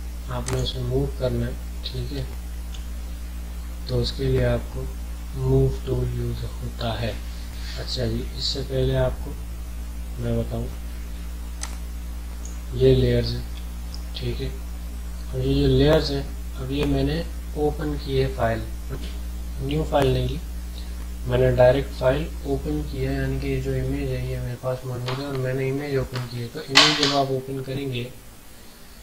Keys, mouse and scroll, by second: 0.4 click, 2.3 ctrl+z, 11.6-14.9 drag.